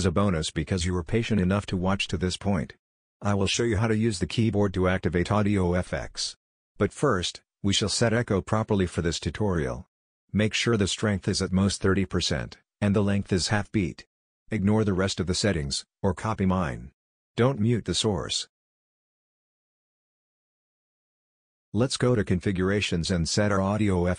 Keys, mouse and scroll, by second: 8.7 click, 9.7 click, 11.1-12.9 drag, 22.5 click, 24.0 click.